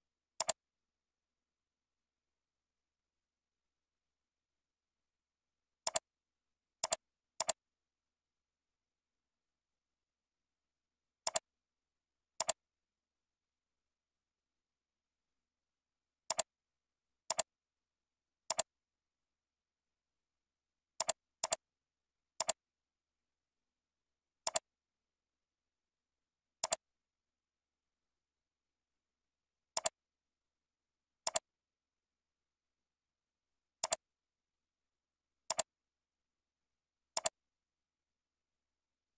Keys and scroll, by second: 13.8 ctrl+z.